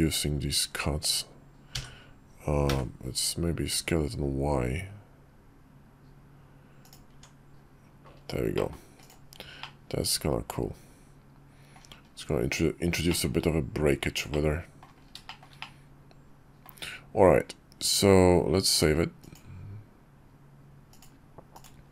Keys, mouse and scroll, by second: 6.8 Tab, 8.3 middle click, 9.3-11.4 middle drag, 12.2 KP_5, 12.8 shift+middle click, 14.0 middle click, 15.0 shift+middle click, 15.3-16.4 middle drag, 19.0-20.0 drag, 20.6 click.